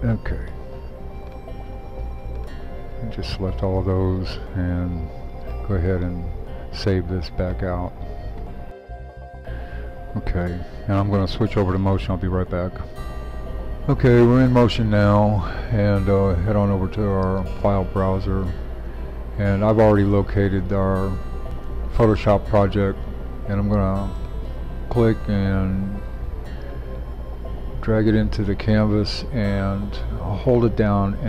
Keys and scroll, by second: 12.9 shift+super+3.